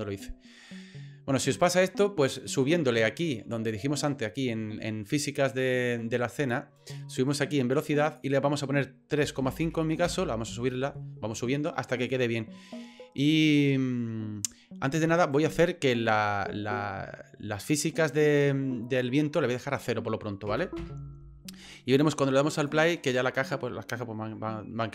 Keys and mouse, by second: 8.0-10.8 drag, 15.2 right click, 18.1 click, 19.7-21.3 drag, 22.6 click.